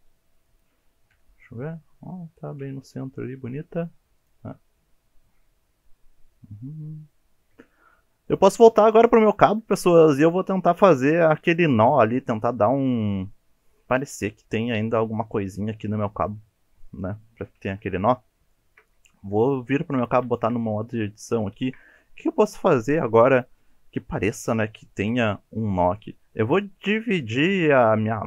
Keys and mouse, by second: 0.5 click, 1.1 KP_7, 2.6 KP_1, 4.7-7.4 middle drag, 8.8 middle drag, 9.4 shift+middle drag, 9.8-10.1 middle drag, 16.6 middle drag, 17.5 KP_1, 18.5 shift+middle drag, 19.9 Tab, 20.3 shift+click, 21.4 shift+middle drag.